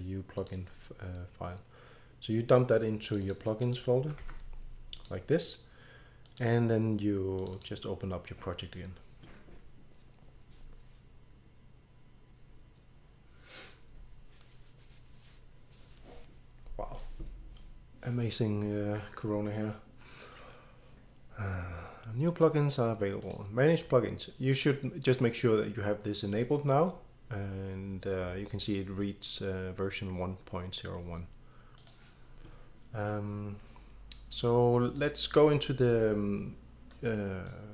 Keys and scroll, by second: 4.2 ctrl+v.